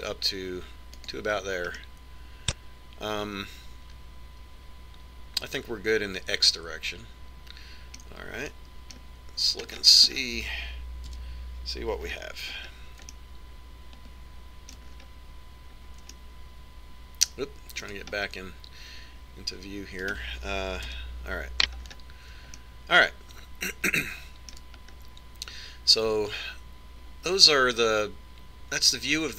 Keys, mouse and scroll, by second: 3.2-5.0 middle drag, 9.9-12.6 middle drag, 11.8-12.6 scroll up 1, 12.6 KP_5, 14.6-16.4 middle drag, 16.4-17.7 scroll down 1, 17.7 scroll up 1, 17.9-19.4 middle drag, 19.8-21.6 middle drag, 21.6 right click, 22.4 KP_Decimal, 23.4-25.7 middle drag, 26.5-28.2 middle drag, 28.4-29.3 middle drag.